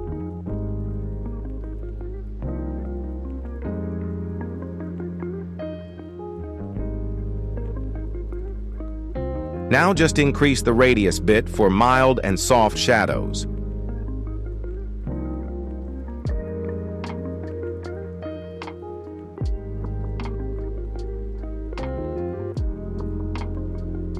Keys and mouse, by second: 4.7 shift+middle click, 8.5-11.4 shift+drag, 16.2 shift+middle click, 16.9 KP_1, 22.6 m.